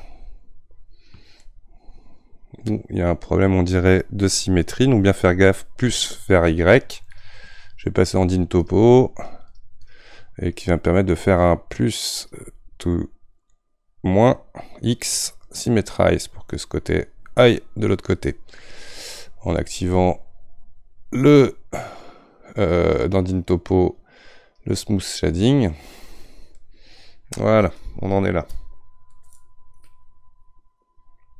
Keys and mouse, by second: 17.3 click, 26.5-31.3 middle drag.